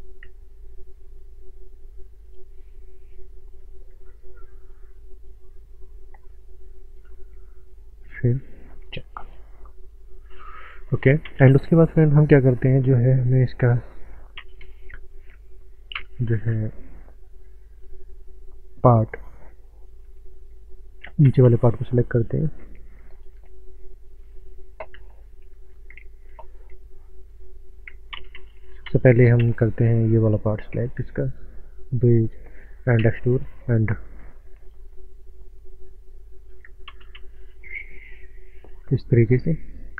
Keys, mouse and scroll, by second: 0.6 shift+middle click, 2.2 click, 3.1 middle click, 4.2 click, 4.9 middle click, 6.3 click, 8.1 Tab, 8.5 scroll down 1, 8.7 middle click, 9.2 click, 9.5 middle click, 10.6 click, 11.2 ctrl+space, 13.0 scroll down 1, 13.6 scroll up 1, 14.4 ctrl+space, 16.0 Tab, 17.8 scroll down 1, 21.0 ctrl+Num_Lock, 21.2 ctrl+space, 21.8 middle click, 23.1 click, 26.0 w, 26.6 click, 28.1 ctrl+space, 28.8 ctrl+space, 30.6 2, 31.2 click, 33.0 e, 33.2 click, 36.9 space, 37.6 scroll up 1, 38.0 shift+middle click, 39.1 click.